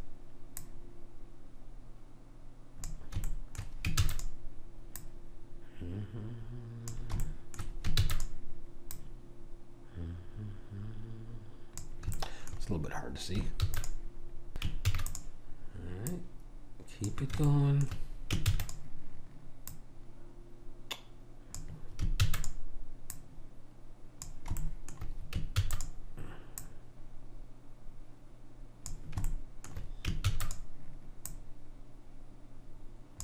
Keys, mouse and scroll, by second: 0.7 click, 4.0 shift+d, 5.0 click, 8.0 shift+d, 8.9 click, 12.2-14.5 middle drag, 13.6 shift+d, 14.9 shift+d, 16.2 click, 17.5 right click, 18.5 shift+d, 19.7 click, 22.3 shift+d, 23.2 click, 24.7 right click, 25.1-26.6 middle drag, 25.7 shift+d, 26.6 click, 29.3 middle click, 30.3 shift+d, 31.3 click.